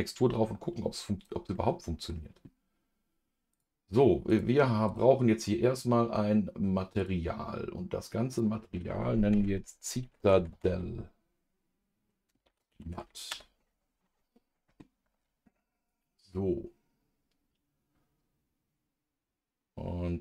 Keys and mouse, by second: 1.0 click, 1.5 middle click, 3.5 click, 4.3 click, 8.3-13.3 drag.